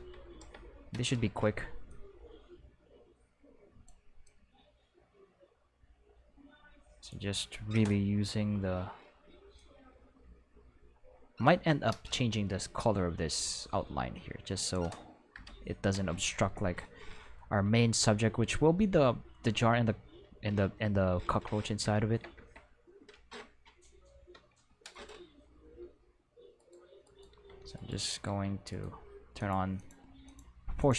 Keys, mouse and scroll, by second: 0.4 Return, 1.9-3.9 drag, 4.2-7.1 drag, 8.3 Return, 9.6-11.5 drag, 12.1-14.7 drag, 15.4 shift+Return, 24.4 Tab, 24.9 right click, 25.8 g, 26.6 right click, 27.0 right click, 27.3 g, 27.8 right click, 28.1 right click, 28.3 g, 28.7 right click, 29.4 click, 29.8 click, 30.3 click, 30.8 click.